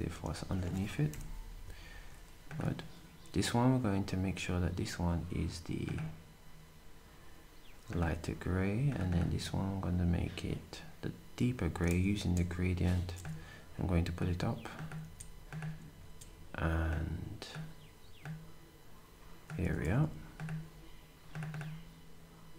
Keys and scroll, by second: 1.1 Delete, 3.0 typing, 12.1 g, 15.0 d, 16.0 d, 19.8 s.